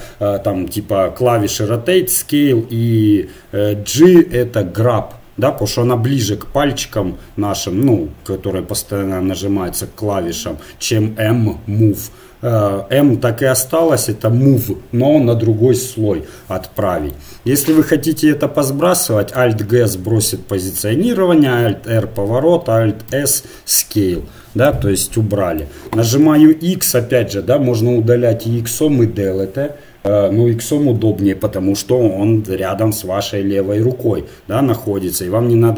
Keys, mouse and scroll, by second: 16.9 middle click, 19.4 alt+g, 21.4 alt+r, 23.1 alt+s, 26.2 x.